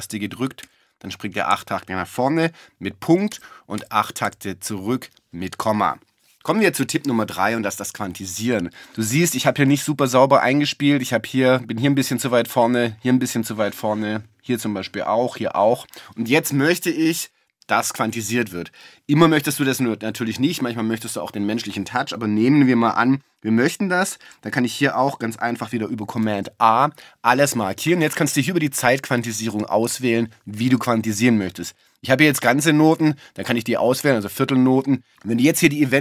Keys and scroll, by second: 3.3 shift+,.